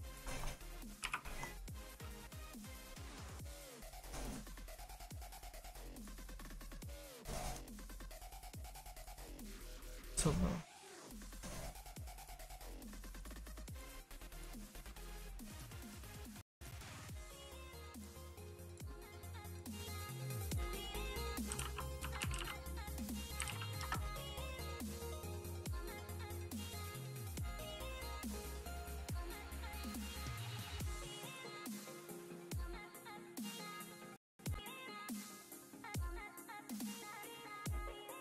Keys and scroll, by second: 14.4 q.